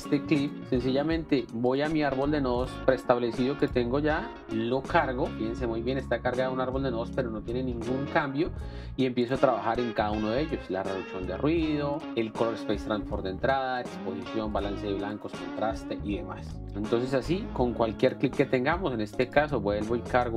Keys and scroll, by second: 0.6 Delete, 0.6 s.